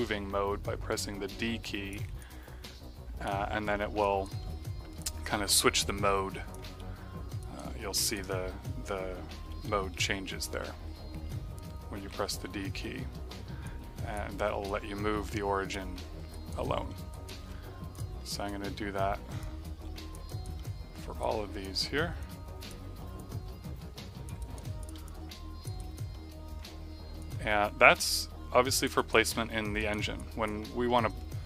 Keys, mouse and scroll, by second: 0.8 click, 2.1 click, 3.5 d, 3.9 right click, 4.3 middle click, 5.3 d, 5.9 click, 6.9 f, 7.3 alt+right click, 7.6 alt+middle click, 7.9 alt+right click, 8.2 alt+middle click, 9.5-12.3 typing, 13.6 click, 14.6 click, 15.8 z, 16.2 right click, 16.8 middle click, 17.0 right click, 17.8 click, 18.1 right click, 19.3 click, 20.2 right click, 20.5 middle click, 21.1 click, 22.1 click, 23.1 click, 24.7 click, 25.0 click, 25.7 right click, 26.0 middle click, 27.1 click, 28.0 click, 29.3 f, 29.7 right click, 30.2 click, 30.8 middle click.